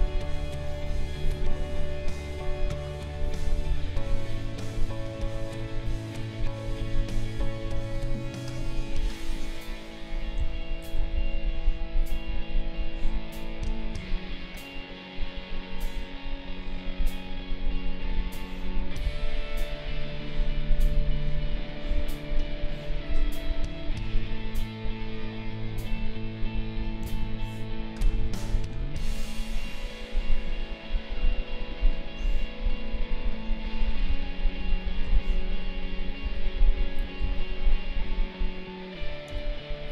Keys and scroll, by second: 10.4 ctrl+z, 11.0 ctrl+z, 27.0 ctrl+z, 35.0 ctrl+z, 37.2 ctrl+z, 39.3 ctrl+z.